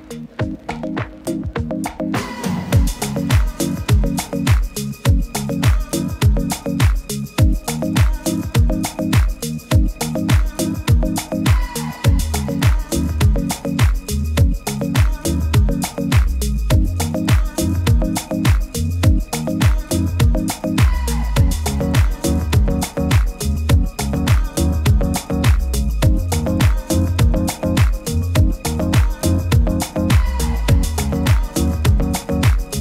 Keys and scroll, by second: 8.9 super++, 21.8 super+z.